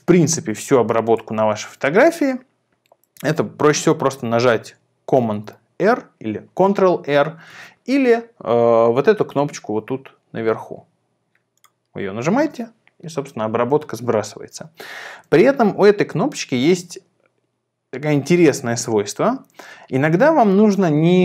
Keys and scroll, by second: 5.3 super+r, 7.6 super+z, 15.2 super+z.